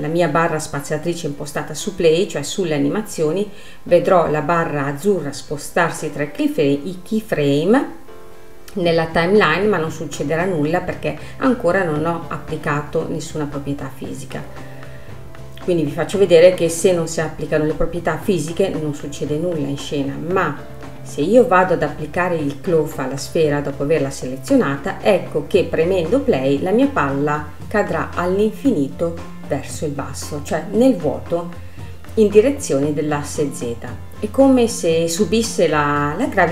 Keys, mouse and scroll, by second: 2.5 space, 3.8-8.5 drag, 8.5-21.1 middle drag, 21.1-24.2 drag, 24.3 space, 26.2 space, 28.2 click, 28.9 space, 30.4 click, 30.9-32.3 scroll down 11, 32.3 space, 32.9-33.3 scroll down 7, 33.9-35.0 scroll down 4, 35.0 space, 36.2-36.5 drag.